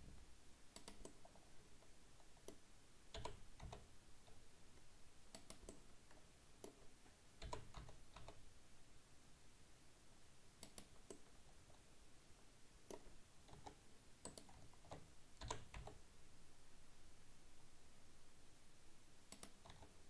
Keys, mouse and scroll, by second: 1.1-3.2 middle drag, 3.2 g, 5.7-7.5 middle drag, 7.5 g, 11.2-13.2 middle drag, 13.2-13.6 scroll up 2, 13.6 Tab, 14.3 right click, 15.5 g, 19.7 Tab.